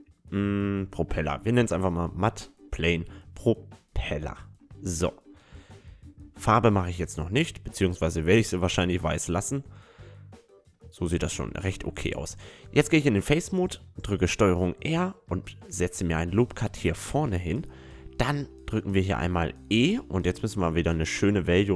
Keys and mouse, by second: 2.2 BackSpace, 4.4 l, 5.6-8.9 middle drag, 7.8-9.5 drag, 9.1 a, 9.6 click, 9.7-12.4 middle drag, 11.7 Tab, 13.0-14.9 drag, 13.8 ctrl+r, 16.0 middle click, 17.0-18.9 drag, 17.7-19.6 right drag, 19.6 middle click, 20.3 e.